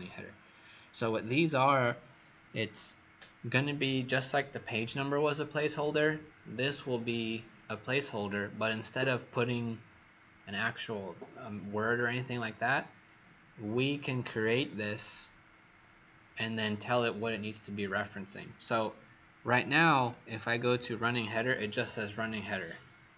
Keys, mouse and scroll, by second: 20.1 click.